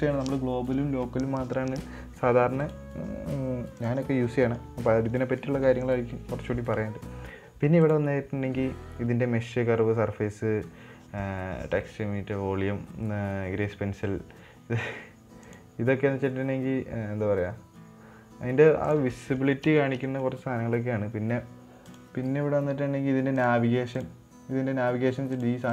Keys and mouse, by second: 4.2 click, 4.7 middle drag, 5.6 middle drag, 8.2-15.1 drag, 15.8 click, 19.7 middle click, 20.2 shift+middle click, 20.5 middle click, 22.4 click, 24.4-25.7 drag.